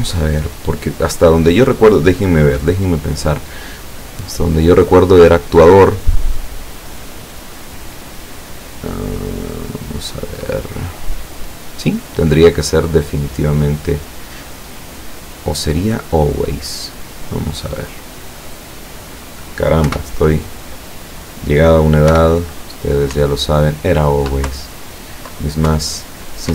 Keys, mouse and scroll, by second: 3.1 click, 15.0 click, 17.1 click, 18.0-18.9 drag, 19.9 p, 22.1 p, 23.2 Up, 24.5 Down, 25.8 Up.